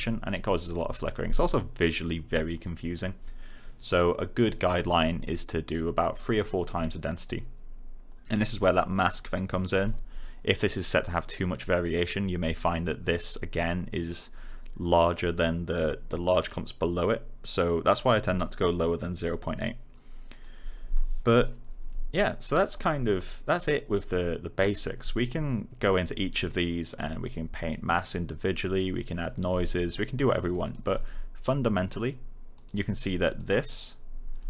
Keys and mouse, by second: 6.3 click, 8.7 click, 17.5 click, 22.1 alt+click, 27.6 click, 30.1 alt+click, 30.4 right click, 30.9 click.